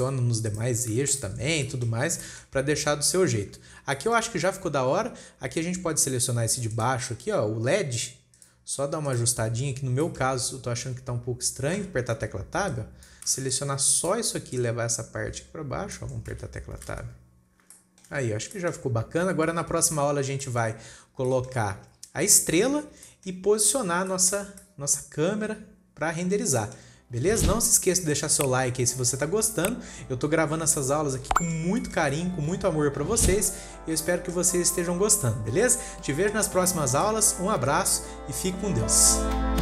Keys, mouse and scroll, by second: 1.4 alt+a, 1.4-2.0 scroll down 10, 1.6 click, 2.1-4.0 shift+middle drag, 4.0-4.4 scroll up 3, 4.4-4.9 shift+middle drag, 4.9-6.3 scroll up 1, 6.3 scroll up 1, 6.6 click, 7.2 click, 7.8-8.8 scroll up 4, 8.8 click, 9.5 click, 10.2 scroll down 3, 10.5-10.9 shift+middle drag, 10.9 scroll up 2, 12.8 Tab, 14.0 click, 15.0 click, 16.6 scroll down 3, 16.8 Tab, 17.4 alt+a, 17.8-18.2 scroll down 1, 18.2-18.7 shift+middle drag, 18.7-19.0 scroll down 6, 19.0-19.4 shift+middle drag, 19.4-20.5 scroll up 8, 20.5-20.9 scroll down 2, 20.9-21.3 shift+middle drag, 21.3-21.7 scroll up 4, 21.8-23.1 shift+middle drag, 23.1-23.5 scroll down 5, 23.5-24.2 shift+middle drag, 24.2-24.6 scroll down 3, 24.6 shift+middle click, 24.7-25.1 scroll up 1, 25.1-27.4 middle drag, 27.4 scroll up 3, 27.9 shift+middle click, 28.2 scroll down 3, 28.4-28.8 shift+middle drag, 28.8-29.3 scroll up 4, 29.3 scroll down 2, 29.4-33.3 middle drag, 33.3-34.2 scroll up 1, 34.2 scroll down 1, 34.5-34.9 middle drag, 34.9 scroll up 1, 35.0-39.6 shift+middle drag.